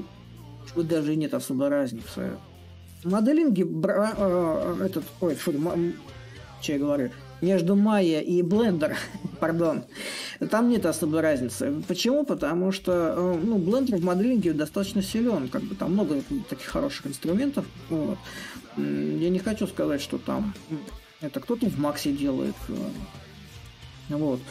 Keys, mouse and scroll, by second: 0.0-2.7 drag, 2.7 a, 3.8-8.8 drag, 11.0-12.9 drag, 14.8-16.0 drag, 16.4-18.4 drag, 20.7 click, 21.9 click, 23.5-24.5 drag.